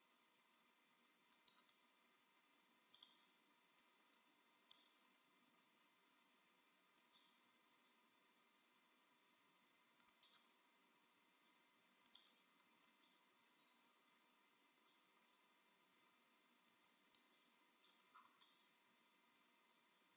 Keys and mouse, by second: 3.0-4.8 drag, 4.9 middle click, 5.6 e, 8.8 click, 8.8 right click, 9.4 e, 12.2-13.8 drag, 19.8 ctrl+r.